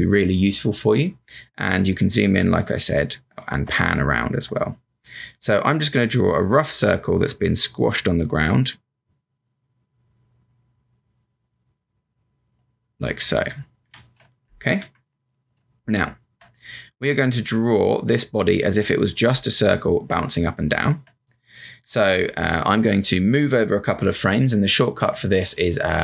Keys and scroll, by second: 3.6 space, 15.2 v, 15.5 space, 18.8 space, 20.1 space.